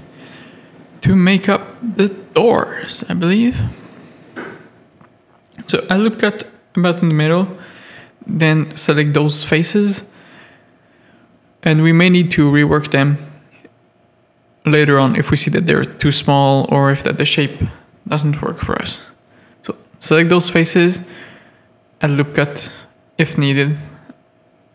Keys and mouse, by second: 0.7 3, 1.8 z, 2.1 a, 2.9 1, 3.7 z, 4.3 ctrl+r, 5.5 3, 7.1 z, 7.6 shift+middle click, 10.0 z, 11.1 shift+middle click, 11.7 click, 12.6 Tab, 12.7 alt+a, 13.1 click, 13.4 Tab, 13.9 shift+middle click, 14.5 3, 15.1 alt+click, 15.8 alt+shift+click, 16.8 alt+shift+click, 19.2 shift+middle click, 20.3 1, 20.7 alt+click, 23.0 z, 23.6 z, 24.1 s.